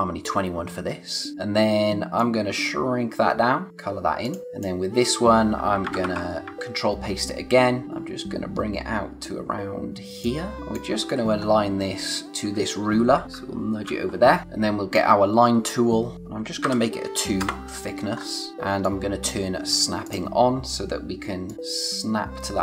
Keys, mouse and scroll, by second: 2.1 alt+shift+click, 5.8 ctrl+c, 6.0 ctrl+v, 6.5 shift+Left, 7.8 alt+shift+click, 11.3 scroll up 1, 13.2 Right, 14.0 scroll down 1, 14.4 click, 16.6 2, 17.3 Return, 18.1-18.7 scroll up 1, 18.8 click.